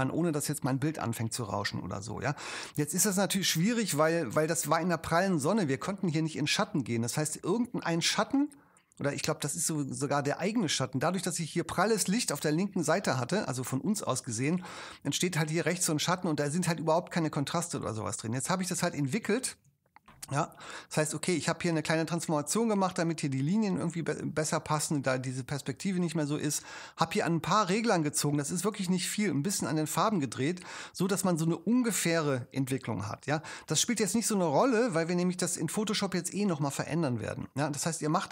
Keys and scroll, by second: 19.3 shift+v.